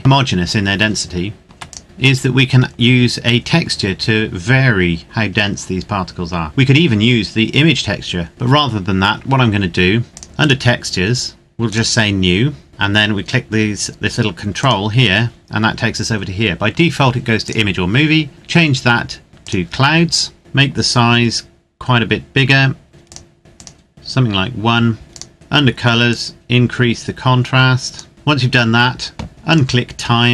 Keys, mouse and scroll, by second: 1.4 ctrl+s, 1.8 click, 2.3 scroll down 1, 4.9-6.7 scroll up 1, 10.1 click, 14.5 click, 17.4 click, 19.4 click, 23.9 KP_Enter, 25.1 click, 26.0 click, 28.1-28.4 scroll down 1, 29.5 click.